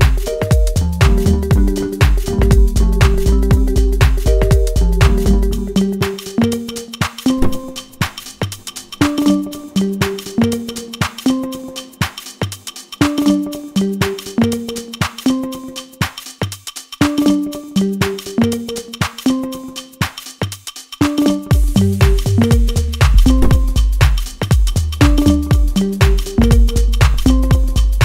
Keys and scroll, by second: 2.9 F2, 19.7 ctrl+space, 20.6 F3.